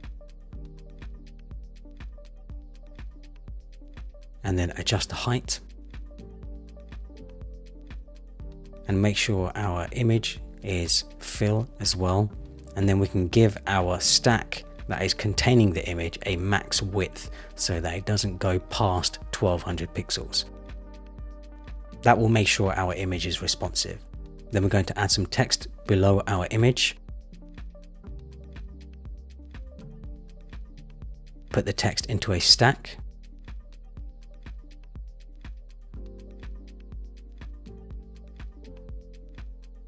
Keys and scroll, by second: 0.1 shift+Up, 5.2 shift+Up, 6.0 shift+Up, 7.0 shift+Up, 12.8 Return, 21.5 Return, 25.0 super+v, 28.7 super+v, 39.4 Return.